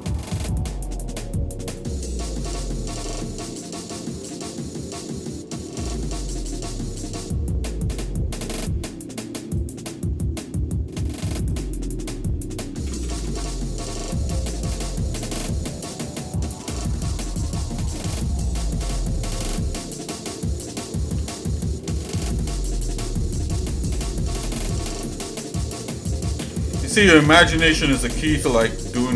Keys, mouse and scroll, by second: 2.3 s, 4.1 g, 11.9 click, 12.8 ctrl+KP_Add, 13.1 ctrl+KP_Add, 13.2 ctrl+KP_Add, 14.1 s, 17.9 shift+middle click, 18.8 shift+middle click, 19.4 middle click, 19.9 middle click, 21.0 g, 24.9 shift+middle click, 25.4 click, 26.4 l.